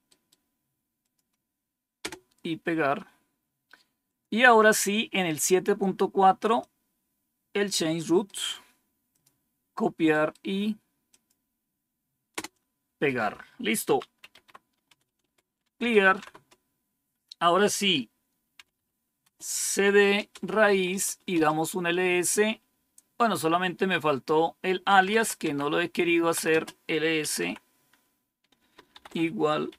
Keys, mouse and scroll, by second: 0.0 right click, 0.9 click, 1.9 Return, 4.0 click, 6.5-7.6 drag, 8.2 right click, 9.0 click, 10.0 right click, 11.0 click, 12.2 Return, 13.9-16.6 typing, 18.4-21.2 typing, 24.6-27.8 typing, 28.9-29.7 typing.